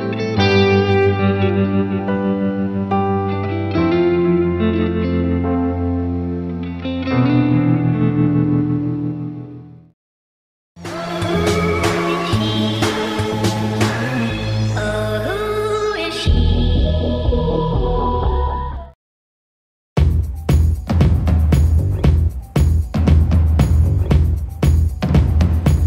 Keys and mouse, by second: 0.7 ctrl+z, 2.1 ctrl+z, 3.2 right click.